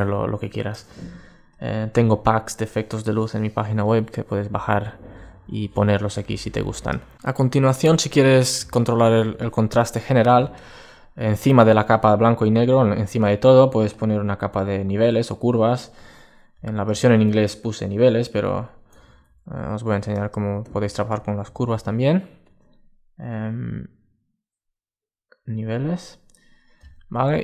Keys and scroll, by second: 7.3 super+space, 18.8 super+z, 21.3 super+d.